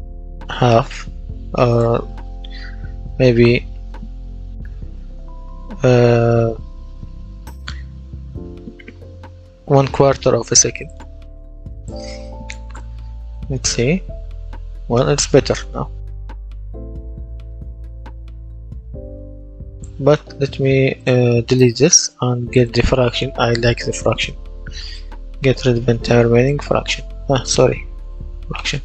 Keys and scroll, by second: 0.6 Return, 12.6 w, 13.0 space, 14.5 space, 15.9 space, 18.2 Escape, 21.8 Delete, 22.7-25.4 typing, 28.0 Delete, 28.7-28.8 typing.